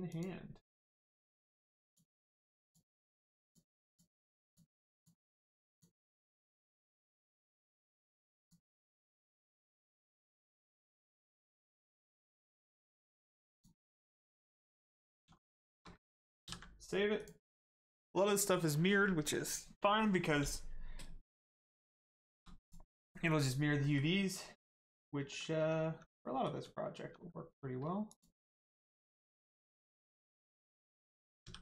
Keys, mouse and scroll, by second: 0.1 shift+click, 1.0 shift+click, 3.4 shift+click, 3.8 shift+click, 6.6 shift+middle click, 7.1 middle click, 8.4 click, 11.4 middle click, 13.5 click, 14.2 middle click, 14.6 click, 15.0 middle click, 15.2 shift+scroll down 1, 15.6 shift+middle click, 16.0 ctrl+middle click, 16.4 ctrl+s, 17.2 click, 21.8 middle click, 22.2 shift+middle click, 22.6 middle click, 23.0-23.8 scroll down 1, 23.8 middle click, 24.1 Caps_Lock, 24.8 middle click, 25.2 Caps_Lock, 25.8 Tab, 26.2 middle click, 26.6 Tab, 28.1 shift+click, 28.9 middle click, 29.6 scroll down 1, 30.4 middle click.